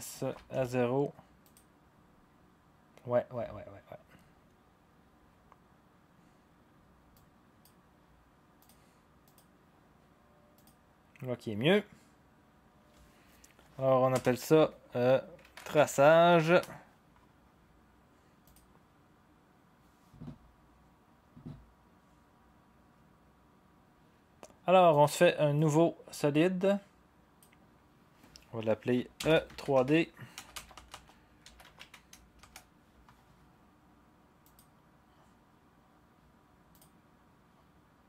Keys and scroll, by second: 0.5 0, 14.1 Return, 15.1-16.8 typing, 28.9-32.9 typing, 34.3-35.0 typing.